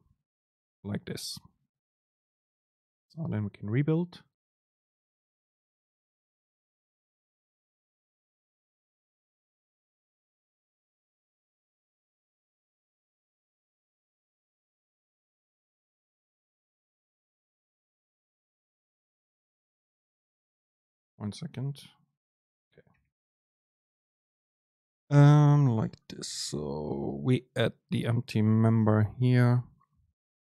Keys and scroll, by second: 2.2 ctrl+shift+super+F9.